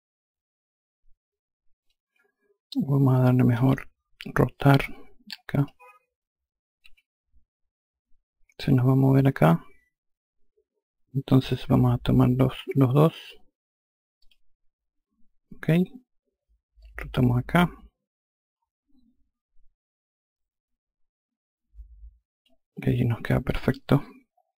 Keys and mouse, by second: 3.1 ctrl+z, 5.0 click, 6.3 r, 13.7 ctrl+click, 16.3 click, 23.0 F1.